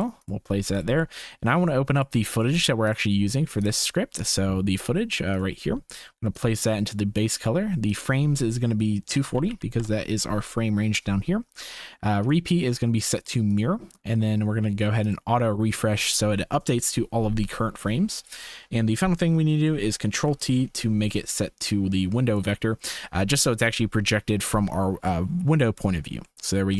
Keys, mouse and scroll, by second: 6.4-7.2 drag, 8.0-9.9 drag, 12.2-13.7 drag, 15.1-17.3 drag, 17.6 shift+click, 20.1 ctrl+t, 21.6-22.4 drag, 23.7 shift+click, 26.3-26.7 shift+middle drag.